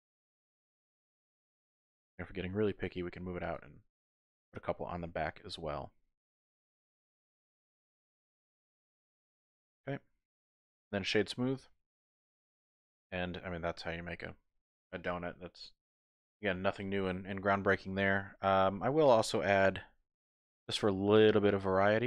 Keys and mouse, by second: 1.5 Tab, 2.9 g, 3.0 y, 3.4 click, 3.8 click, 4.2 middle click, 5.1 Tab, 5.5 middle click, 6.7 ctrl+r, 8.3 click, 8.6 ctrl+r, 9.5 click, 9.9 middle click, 10.4 Tab, 10.8 click, 11.6 Tab, 11.8-13.4 middle drag, 13.4 click, 18.2 middle click, 20.4 ctrl+r.